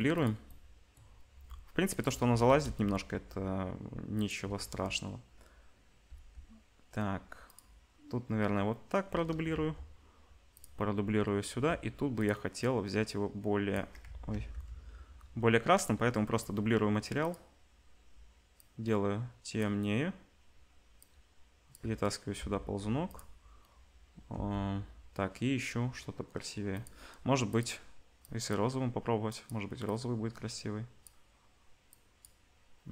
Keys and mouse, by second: 1.3 g, 2.4 KP_0, 3.1 g, 6.1 g, 9.5 shift+d, 9.7-13.0 middle drag, 11.5 r, 13.0-17.3 drag, 14.3 ctrl+z, 17.3-21.0 middle drag, 21.0-23.2 drag, 22.4 r, 23.2-25.4 middle drag, 24.3 g, 27.5 click.